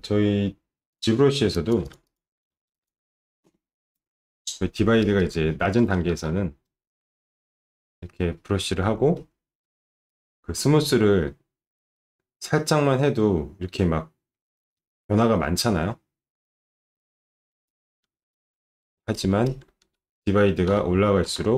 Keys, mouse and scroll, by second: 0.9 click, 1.5 click, 1.8 alt+click, 2.0 click, 2.3-3.2 typing, 2.7 click, 5.0 alt+click, 5.2 alt+click, 5.5-6.8 typing, 6.1 click, 6.6-8.5 drag, 8.7 click, 9.1 click, 9.7 click, 9.7 s, 10.1 click, 11.4-14.3 shift+drag, 14.8 click, 15.6-17.5 shift+drag, 17.7 shift+click, 18.1 ctrl+z, 18.3 alt+click, 18.5 alt+click, 18.8 ctrl+z, 19.1 click, 19.2 ctrl+z, 19.4 alt+click, 19.5 ctrl+z, 20.6 ctrl+d, 21.2 ctrl+d.